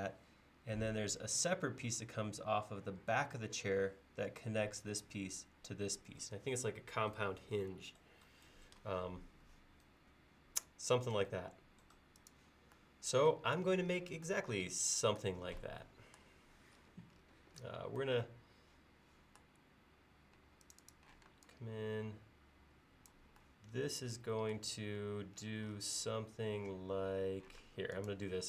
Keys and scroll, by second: 21.2 p, 25.0 l, 27.7 space.